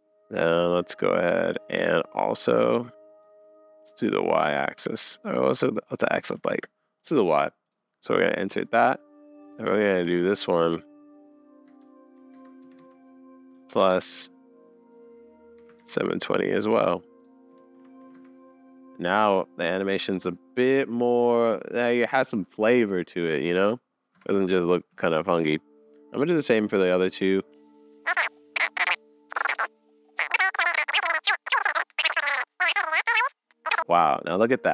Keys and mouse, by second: 0.2 shift+Left, 0.2 space, 3.8 click, 4.7 super+z, 5.5 click, 6.4 super+z, 8.5 shift+Right, 9.4 click, 12.8 click, 12.8 BackSpace, 15.9 click, 17.7 shift+Left, 18.1 space, 24.1 space, 24.5 middle click, 25.1 shift+Left, 27.0 click, 27.4 click, 27.5 super+s, 27.6 click, 28.0 click, 28.3 shift+Right, 28.5 click, 30.1 shift+Left, 31.1 middle click, 33.8 shift+Left, 33.8 space.